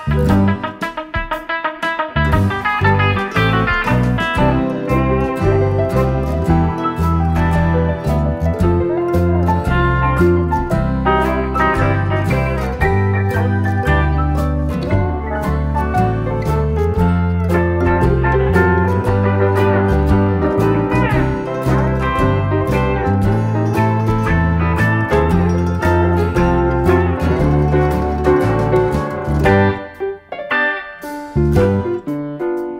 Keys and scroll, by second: 2.5 F1, 5.0 shift+F6, 13.2 F1, 17.9 space, 18.7 shift+F6, 28.4 F1, 30.7 F1, 31.0-31.8 typing.